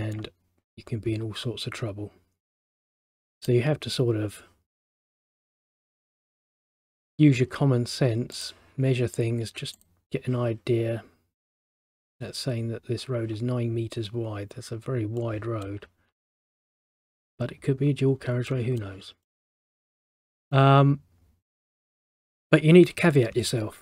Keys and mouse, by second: 3.3 middle click, 6.0 click, 7.1 click, 8.5 click, 15.3 middle click, 18.6 middle click, 19.4 middle click.